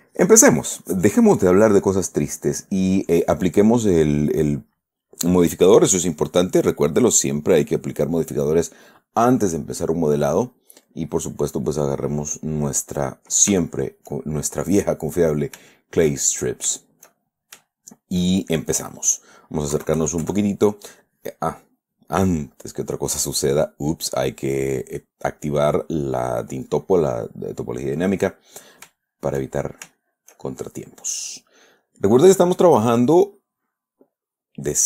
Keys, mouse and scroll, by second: 3.0 click, 6.8 click, 8.0 click, 10.5 click, 11.2 click, 12.1-13.5 middle drag, 14.0-15.0 shift+middle drag, 15.0 shift+middle click, 16.1 shift+middle click, 17.1-18.7 shift+middle drag, 20.1 KP_Add, 22.9 click, 23.6 click, 24.4 click, 28.1 middle click, 29.3-30.3 shift+middle drag, 31.2 shift+middle click, 32.6 right click.